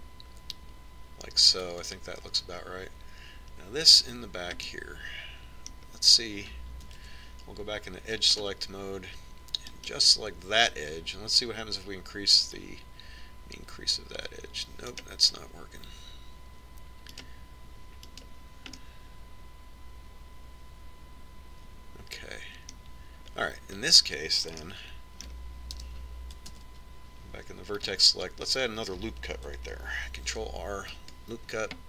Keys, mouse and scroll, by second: 6.4-8.3 middle drag, 8.8 ctrl+Tab, 11.5 click, 12.3-13.3 right drag, 14.3-16.1 drag, 19.0-21.5 right drag, 20.6-21.7 drag, 21.7 middle click, 25.4-27.6 middle drag, 27.6 KP_1, 28.4 ctrl+Tab.